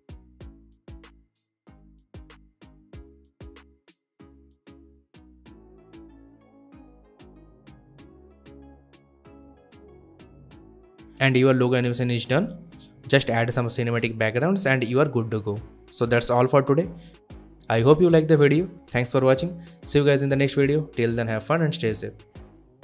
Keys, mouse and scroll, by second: 0.4 space, 0.9-1.7 drag, 5.8 space, 9.0 space, 10.0-10.6 alt+scroll down 1, 10.6 alt+scroll up 1, 11.4-16.0 drag, 21.1 space.